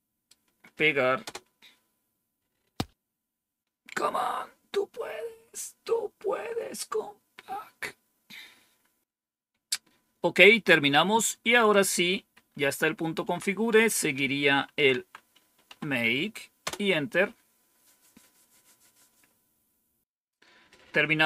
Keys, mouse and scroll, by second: 1.2 Return, 11.6 click, 12.3 Up, 13.2 Down, 14.4-16.1 typing, 16.6 Return.